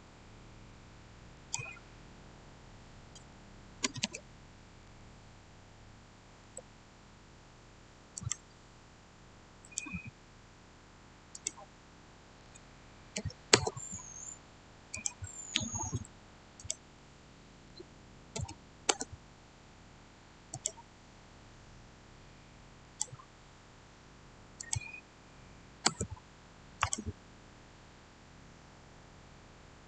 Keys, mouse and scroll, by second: 1.2 click, 3.1-3.9 typing, 4.7 Return, 8.1 click, 12.3-13.0 typing, 13.4 Return, 14.8 click, 17.6-18.2 typing, 18.8 Return, 20.4 click, 22.7 click, 25.8 Return, 26.7 click.